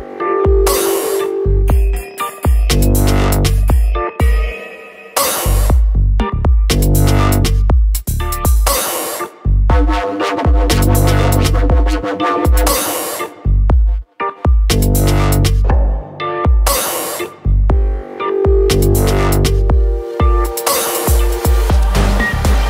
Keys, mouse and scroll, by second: 5.0 ctrl+click, 6.4 click, 14.8 t, 15.4 click, 18.4 click, 19.3-20.3 scroll down 1.